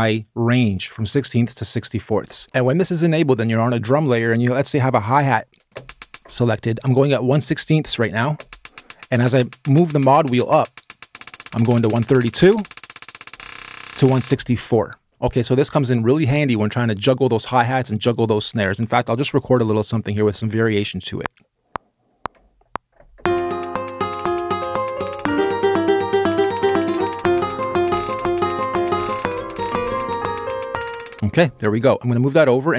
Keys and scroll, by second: 21.0 r, 31.2 space.